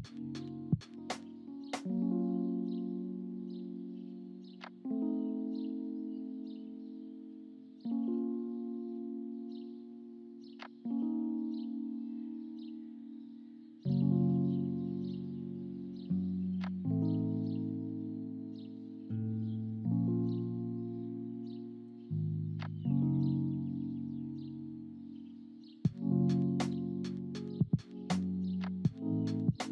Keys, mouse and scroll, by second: 7.8 space, 8.5 space, 24.5 space, 25.4 ctrl+z, 26.2 space, 29.3 space.